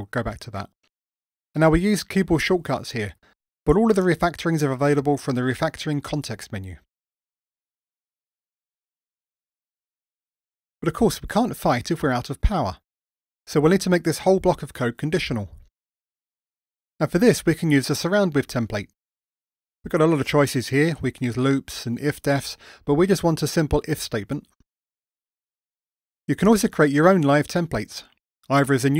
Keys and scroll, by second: 17.5 alt+super+t, 25.6 Tab, 28.8 super+j.